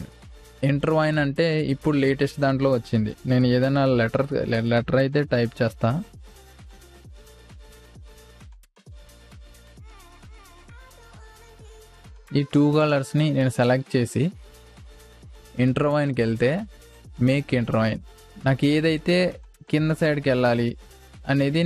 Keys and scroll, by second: 4.0 t, 5.5 shift+a, 10.3 i, 10.7 v, 11.0 space.